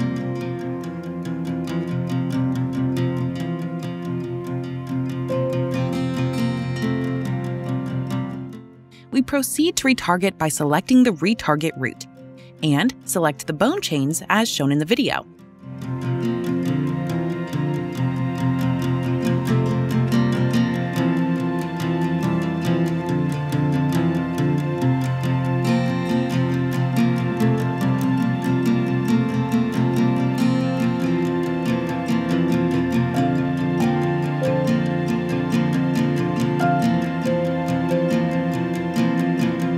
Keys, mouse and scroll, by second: 0.1-2.7 typing, 4.0-4.7 typing, 5.3 Return, 7.7 click, 7.8-9.6 typing, 7.9 click, 9.7 right click, 11.4 click, 14.4 click, 15.6 typing, 15.9 Return, 17.4 click, 19.1 click, 19.7 right click, 22.9 click, 24.7 click, 25.4 ctrl+click, 26.0 ctrl+click, 26.5 ctrl+click, 27.0 click, 27.6 click, 33.4 click, 34.7 ctrl+click, 35.3 right click, 36.5 click, 37.9 click, 38.8 click.